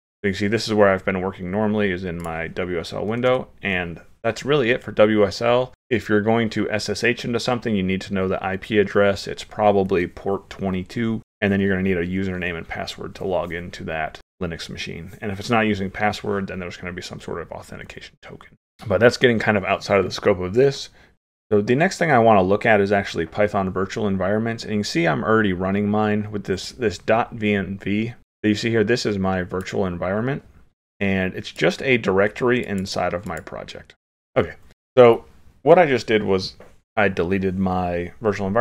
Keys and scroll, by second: 3.2 super+Right, 3.3 super+Right.